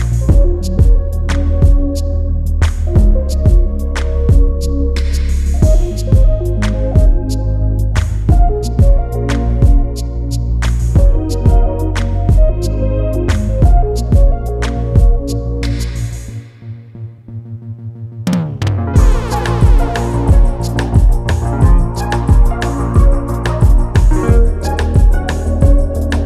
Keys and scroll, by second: 14.3 ctrl+t.